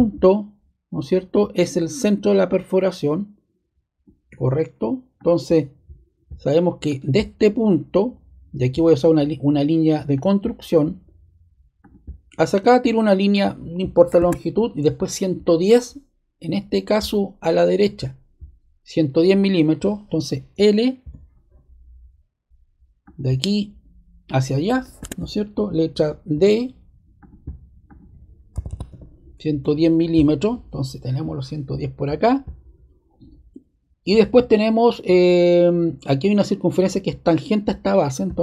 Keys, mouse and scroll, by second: 0.2 click, 5.1-6.2 drag, 6.8-7.9 drag, 10.1 click, 11.8 click, 13.3 click, 14.1 ⟲, 21.0 click, 23.0 click, 24.2 click, 26.3 d, 27.1 click, 27.8 click, 28.2-29.3 typing, 29.6 Return.